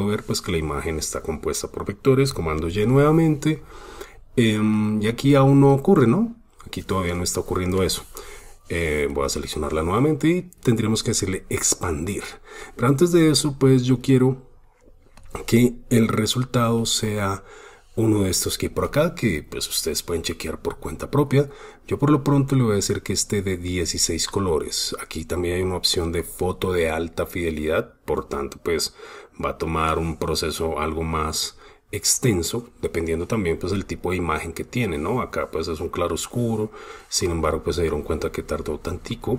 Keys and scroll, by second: 2.3 super+y, 37.6 super+space, 38.9 super+space.